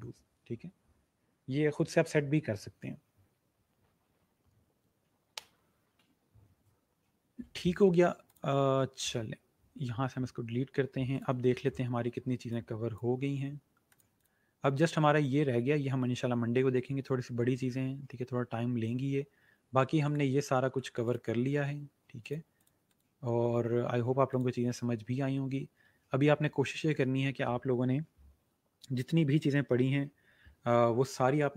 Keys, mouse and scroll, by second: 8.3 click, 11.1 click, 19.3-20.0 scroll up 1, 20.0 click, 21.6-22.1 scroll down 1, 22.1 click, 26.6 scroll up 1.